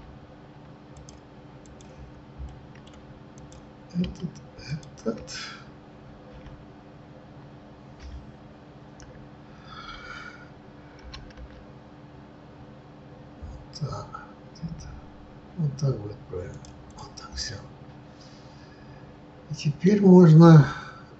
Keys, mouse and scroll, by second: 0.8 z, 2.5 middle click, 3.3 click, 6.3 KP_1, 11.0 g, 16.8 click, 17.5-21.1 middle drag.